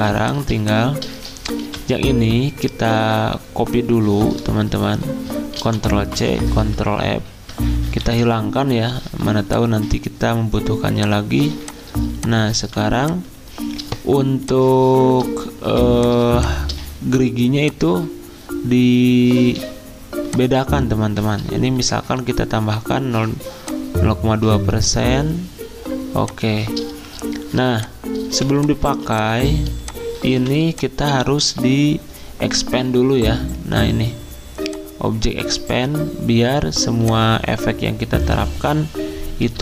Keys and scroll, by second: 1.6 v, 5.6 ctrl+c, 6.3 ctrl+f, 8.0 ctrl+3, 11.3 z, 12.6 typing, 14.6-15.6 typing, 23.1 2, 28.3 v, 28.9 z, 30.3 v, 39.5 z.